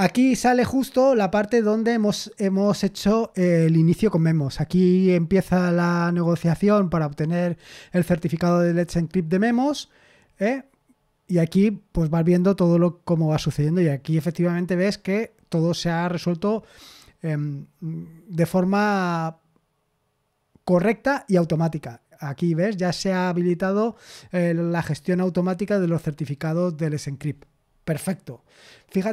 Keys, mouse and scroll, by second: 4.9-7.6 scroll up 1, 11.2-14.1 scroll down 1.